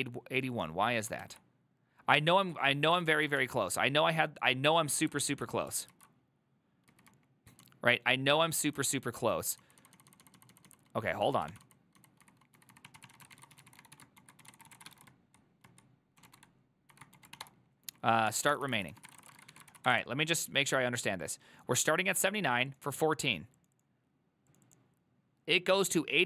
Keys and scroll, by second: 1.3 alt+{, 3.2 ctrl+a, 3.5 1, 6.0 ctrl+u, 7.0-9.2 typing, 11.4-20.5 typing.